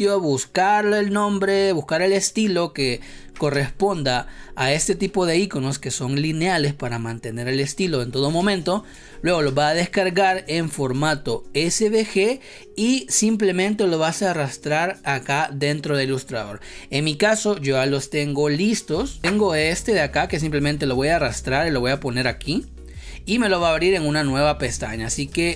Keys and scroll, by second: 3.4 space, 4.6 space, 8.3 space, 9.4 space, 25.2 space.